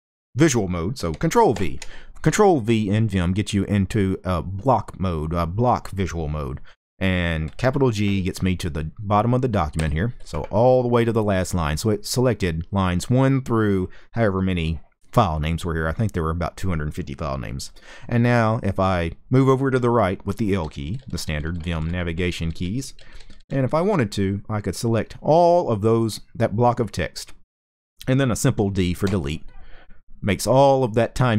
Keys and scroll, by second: 1.2 ctrl+v, 9.5 shift+g, 20.1-23.6 typing, 28.7 d.